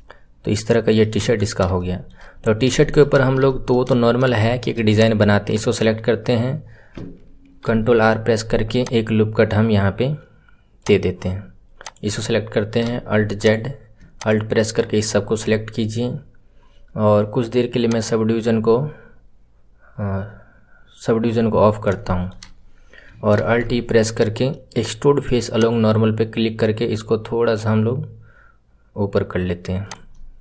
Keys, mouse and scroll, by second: 1.1 KP_1, 1.4-1.7 scroll down 5, 1.7-2.3 shift+middle drag, 2.3-2.7 scroll up 4, 2.7-3.4 shift+middle drag, 3.4-4.3 scroll up 2, 4.3-4.9 shift+middle drag, 4.9 click, 11.7-12.7 drag, 12.7 alt+z, 13.3 click, 14.1 alt+click, 17.9 click, 21.7 scroll up 2, 22.0-23.3 shift+middle drag, 23.3 alt+e, 30.1 middle click.